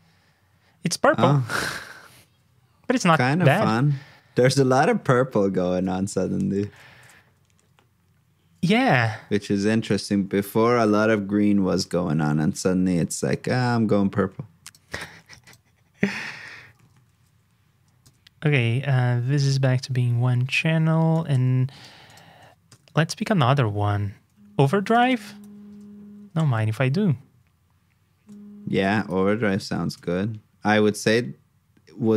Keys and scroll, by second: 7.0 super+j, 14.8 super+c, 17.1 super+v, 22.8 super+Tab, 25.4 super+c, 25.7 super+Tab, 26.4 super+v, 29.0 super+c, 29.4 super+j.